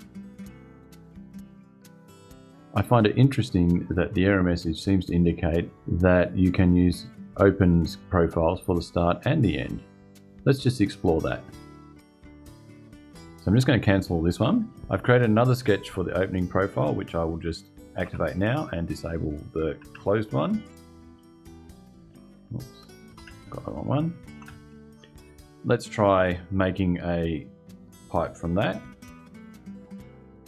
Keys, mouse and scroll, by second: 1.3 click, 13.0 click, 14.1 click, 17.7 space, 18.2 click, 19.5 space, 20.4 click, 22.6 click, 22.9 space, 23.5 click, 24.1 space, 28.4 click, 29.4 click.